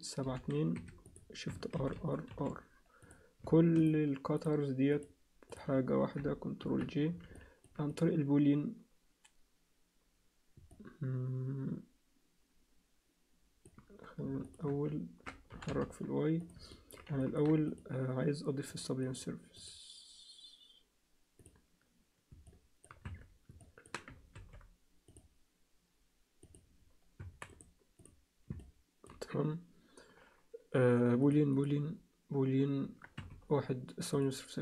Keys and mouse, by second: 1.8 shift+r, 2.3 shift+r, 3.8 shift+click, 4.9 shift+click, 5.5 shift+click, 6.6 ctrl+j, 7.3 alt+middle click, 7.9-9.5 drag, 10.7-13.7 alt+middle drag, 15.5 g, 16.8 alt+middle click, 17.2 ctrl+alt+middle click, 17.7 click, 18.7 click, 19.1 click, 19.5-21.9 drag, 22.5 alt+middle click, 23.0 Tab, 23.7 alt+middle click, 24.3 ctrl+r, 27.2 Tab, 27.5 right click, 28.6 alt+middle click, 31.5-33.4 drag.